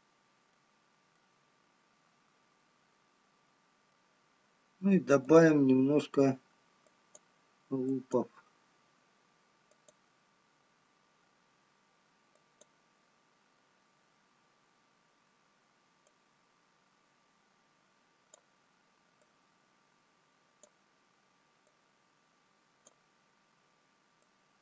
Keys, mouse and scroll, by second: 0.3 middle click, 1.8 middle click, 8.3 click, 12.9 click, 17.8 click.